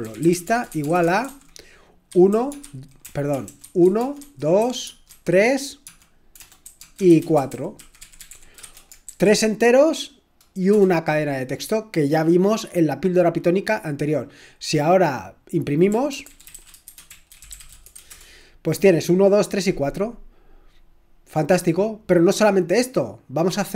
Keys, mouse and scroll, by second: 0.0-1.2 typing, 2.3-9.6 typing, 10.7 typing, 15.7-18.3 typing.